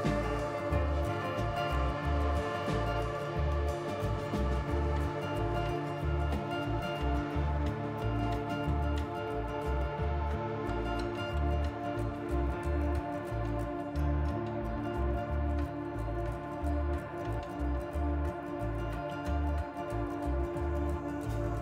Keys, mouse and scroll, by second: 1.0 click, 1.2 g, 2.2 click, 2.5 g, 3.5 click, 3.8 g, 4.5 click, 4.8 g, 5.5 middle click, 6.0-6.8 scroll down 5, 6.4 middle click, 7.3 click, 8.0 KP_3, 8.7-9.5 scroll up 5, 9.6 shift+middle click, 10.0 scroll up 1, 10.4 g, 11.9 click, 12.1 g, 13.4 click, 13.7 g, 15.1 click, 15.3 g, 16.3 click, 16.5 g, 17.5 click, 17.7 g, 18.6 click, 18.9 g, 20.8-21.2 scroll down 4, 21.2 shift+middle click, 21.5-21.6 scroll up 4.